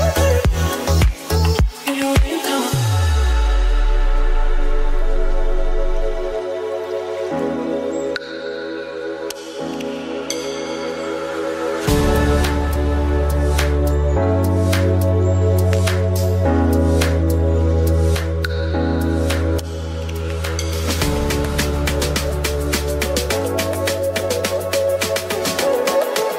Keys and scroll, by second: 3.4 ctrl+z, 3.7 space, 5.4 space, 7.3 [, 9.3 space, 11.6 space, 11.7 ctrl+s, 14.5 space, 20.7 space, 22.6 ctrl+z, 22.9 [, 23.7 ], 23.8 [, 25.2 space.